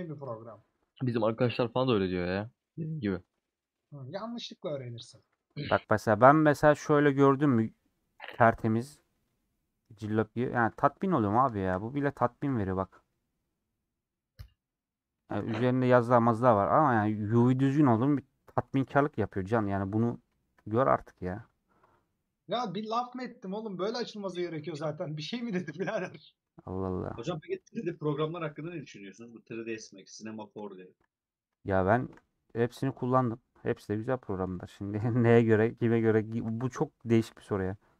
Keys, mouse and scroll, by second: 0.6-3.6 middle drag, 7.0 scroll down 1, 7.2-10.7 middle drag, 10.7 Tab, 11.2 middle click, 11.5-12.0 scroll up 2, 12.2-19.1 shift+middle drag, 19.1 /, 19.7 middle click, 20.2 scroll up 1, 20.4 shift+middle click, 21.0-21.4 scroll up 2, 23.3 scroll down 1, 23.5 h, 25.4 /, 25.7 middle click, 26.1 Tab, 26.4-27.7 middle drag, 27.7 2, 29.0-31.0 middle drag, 31.0 alt+shift+click, 32.1 alt+shift+click, 32.5-35.2 middle drag, 35.2-36.6 scroll up 1, 36.6 3.